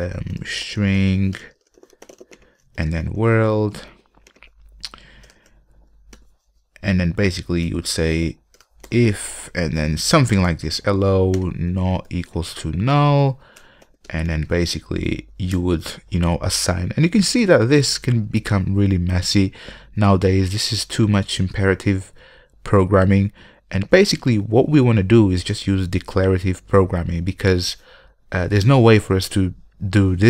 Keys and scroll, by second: 9.5 Return.